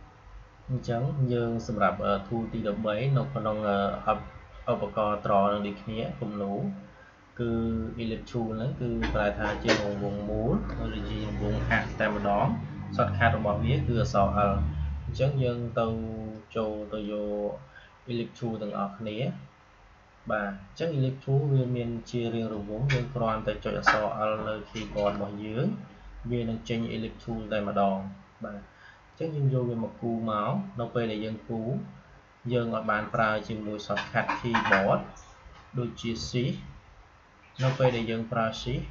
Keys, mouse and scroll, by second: 12.0 l, 16.9-21.4 drag, 29.0-38.9 drag.